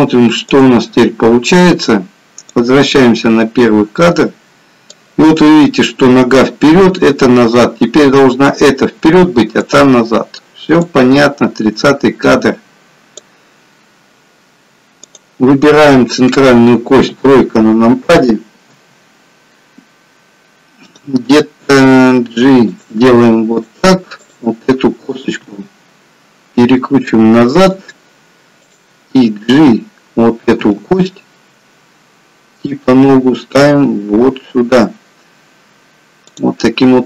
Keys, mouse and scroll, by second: 0.5 click, 1.1 middle click, 2.7 click, 11.0 click, 15.0 click, 16.1 middle click, 17.0 KP_3, 18.9 g, 21.6 g, 23.6 click, 24.2 click, 25.4 r, 28.6 click, 30.9 g.